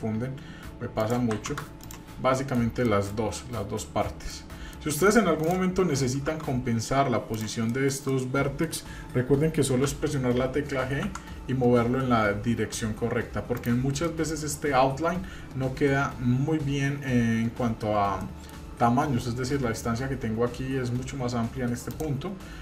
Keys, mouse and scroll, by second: 1.0 click, 1.8 drag, 2.3 middle click, 2.8 middle drag, 3.5 scroll down 2, 3.8-4.3 middle drag, 4.4 scroll up 1, 4.7 middle click, 5.4 click, 6.3 Tab, 6.6 scroll up 2, 7.3 click, 7.7 shift+middle click, 8.1 middle click, 9.8 g, 14.1 middle click, 18.2 shift+middle click, 18.8 scroll up 1, 21.9 click.